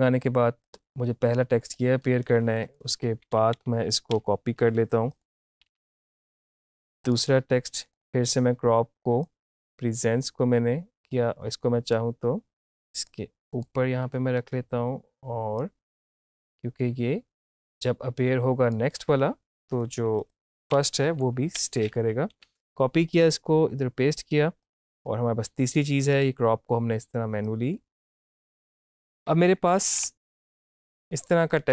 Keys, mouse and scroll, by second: 0.6-2.7 drag, 3.2 Up, 4.6 -, 5.2 click, 5.5 ctrl+c, 5.7 ctrl+v, 6.3-20.2 drag, 20.6 ctrl+c, 21.5 Down, 22.4 ctrl+v, 23.1-29.0 drag, 29.0 Up, 29.6 =, 30.1 click, 30.7 shift+click, 31.5 click.